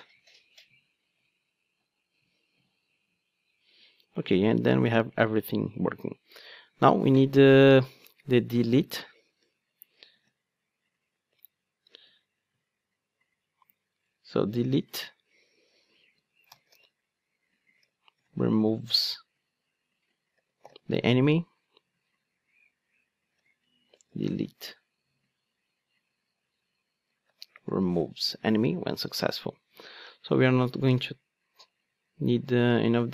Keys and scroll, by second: 10.2 super+c, 11.9 super+v, 31.0 super+x.